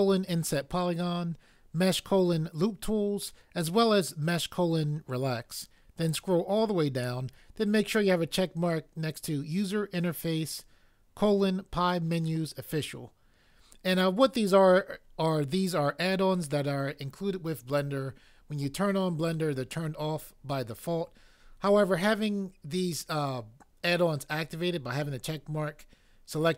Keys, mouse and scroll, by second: 6.1 click.